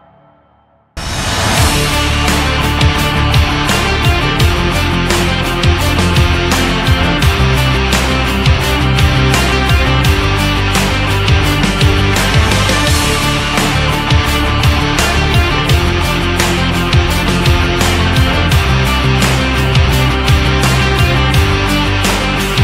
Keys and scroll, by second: 0.3 Caps_Lock, 0.7-2.5 typing, 2.7 ctrl+z, 3.4 Return, 6.6 ctrl+=, 7.7-10.0 typing, 9.2 ctrl+=, 10.5 ctrl+-, 11.0 ], 12.2-14.9 typing, 15.9 [, 16.2 [, 18.2 ], 19.4-22.6 typing.